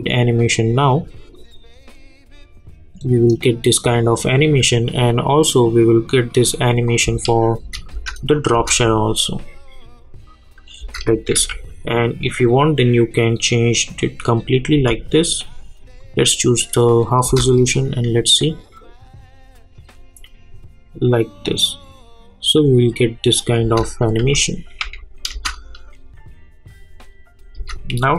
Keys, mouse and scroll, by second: 7.0 space, 8.3 click, 8.5 space, 10.7 space, 11.3 k, 12.5-14.7 drag, 14.7 j, 16.0 click, 17.2 space, 23.6 space, 24.2 j, 24.8 j, 25.3 space, 27.5 space.